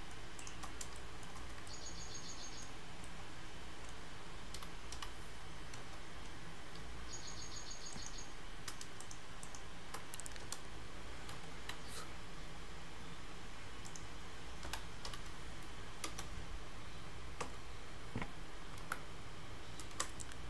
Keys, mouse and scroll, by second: 0.4 shift+click, 0.8 scroll up 2, 1.0 shift+middle click, 1.5 scroll up 2, 1.7 shift+middle click, 2.9 scroll down 1, 3.1 shift+middle click, 4.6 g, 9.1 shift+click, 10.5 f, 14.7 g.